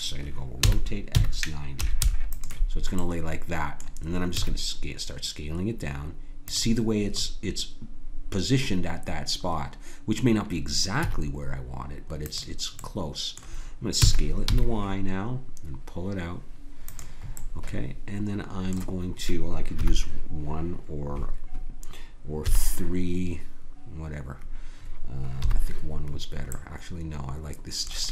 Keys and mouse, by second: 0.7 r, 3.0-4.3 drag, 4.3 s, 11.0 s, 12.8 click, 14.0 s, 19.7 KP_1, 22.5 KP_3, 25.4 KP_1, 26.5-28.1 drag.